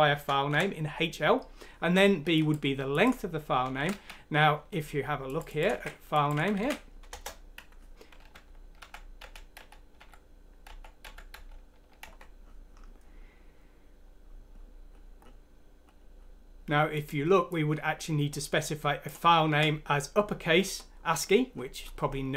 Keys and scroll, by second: 0.2 shift+Home, 0.2 Right, 0.5 Delete, 3.8 Left, 3.9 typing, 5.8 ctrl+c, 6.3 typing, 7.2 Return, 8.3 F3, 8.8 F3, 9.2 F3, 9.6 F3, 10.0 F3, 10.7 F3, 12.0 Escape, 19.5 ctrl+c.